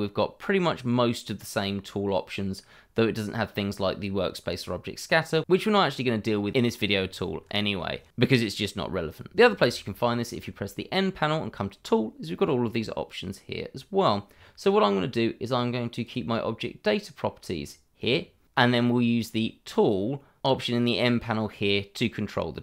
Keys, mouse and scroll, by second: 9.3 n, 16.0 click, 17.3-17.8 scroll down 1, 18.0-18.8 scroll up 1.